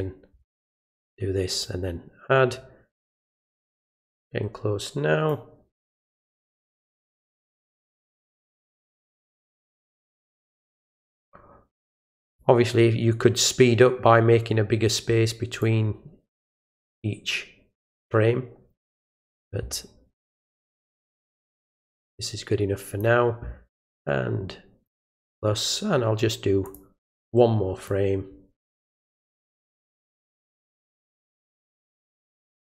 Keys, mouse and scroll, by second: 1.5 click, 3.9-5.3 drag, 7.2-9.0 drag, 10.8 click, 12.3 click, 15.6-18.0 drag, 21.0-23.0 drag, 24.9 click, 26.7 click, 27.9-29.2 drag, 31.4-32.7 drag.